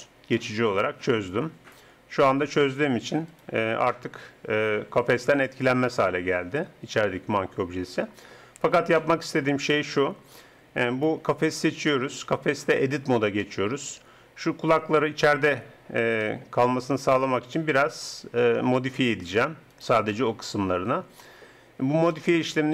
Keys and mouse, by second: 0.7-3.3 drag, 3.3-4.8 right drag, 4.7 r, 7.7 click, 10.9 right click, 11.6 Tab, 17.0-19.7 drag, 19.7 middle click, 20.1-21.5 drag, 21.5 middle click, 22.1 Tab.